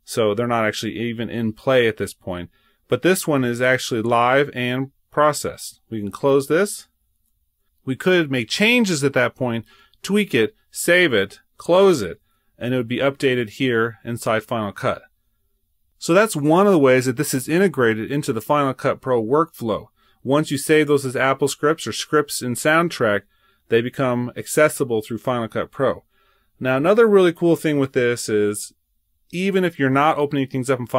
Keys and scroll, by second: 7.2 super+w, 11.8 super+Tab, 27.1 super+Tab.